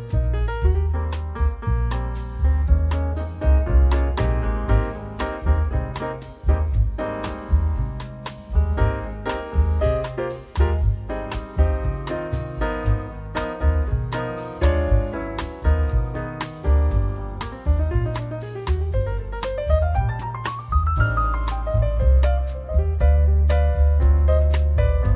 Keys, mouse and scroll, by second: 1.3 click, 2.6 click, 4.0-7.3 drag, 9.1-12.2 drag, 12.6-16.5 drag, 16.7-18.3 drag, 18.5 1, 20.2 0, 21.5 scroll up 2, 22.7 scroll down 1, 23.5 scroll up 1, 24.4 click.